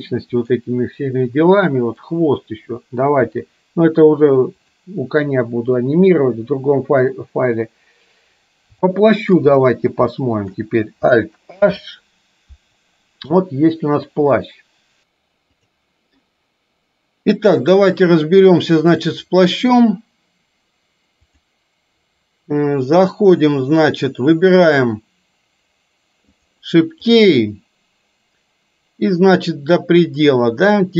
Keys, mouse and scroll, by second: 1.7 middle click, 3.4 KP_3, 9.1-9.4 shift+middle drag, 10.2-10.7 shift+middle drag, 11.7 alt+h, 14.6 click, 18.3 middle click, 29.2 click.